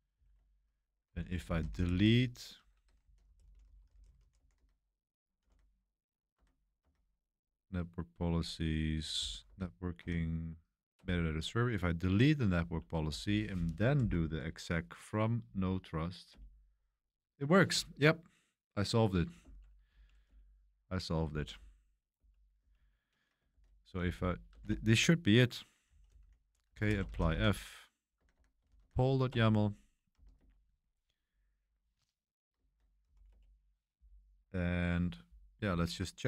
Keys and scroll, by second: 0.1 ctrl+c, 0.8-7.3 typing, 6.3 Tab, 8.8 Tab, 8.9-9.8 typing, 10.0 Tab, 10.9 Return, 12.6 Page_Up, 13.0 Page_Up, 13.5 Page_Up, 14.0 Page_Down, 16.3 Return, 19.9 Up, 20.2 Return, 21.2 Up, 21.5 Up, 22.1 Up, 23.5 ctrl+c, 23.7 Up, 23.9-30.6 typing, 29.3 Return, 32.6 ctrl+l, 33.1 a, 33.2 Return.